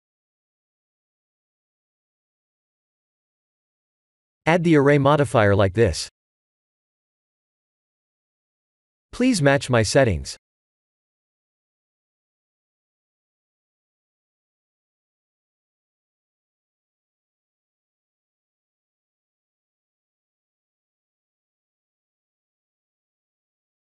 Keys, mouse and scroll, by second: 0.8 ctrl+z, 2.3 click, 6.7 click, 8.2 Tab, 11.8 click, 18.8 click, 19.7 shift+click.